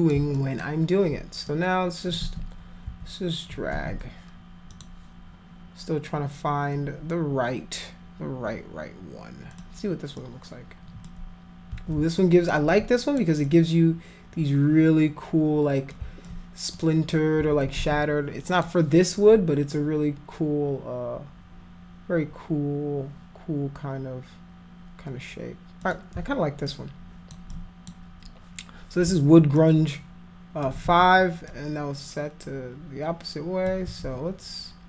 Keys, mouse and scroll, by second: 0.4 alt+click, 1.5 click, 2.2 ctrl+z, 3.7 ctrl+z, 4.7 click, 9.6 click, 10.2 click, 11.7 ctrl+z, 12.2 alt+click, 12.7 alt+click, 13.5-15.9 drag, 16.3 alt+click, 17.8 ctrl+z, 18.6 click, 25.8 click, 26.7 alt+click, 27.5 click, 29.6-30.7 alt+drag, 30.8 ctrl+z, 31.5-33.7 drag, 33.9 ctrl+z.